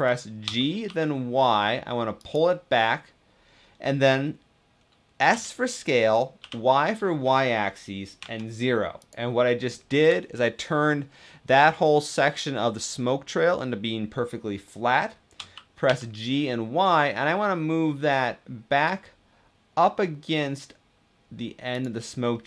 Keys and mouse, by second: 0.2 g, 0.7 y, 5.1 s, 6.2 y, 8.1 0, 15.1 g, 15.7 y, 22.1-22.4 middle drag.